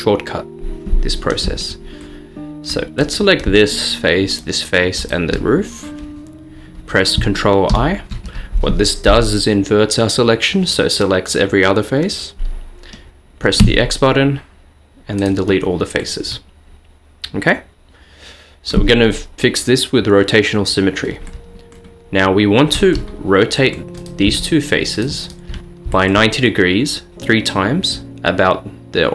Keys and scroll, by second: 13.7 x.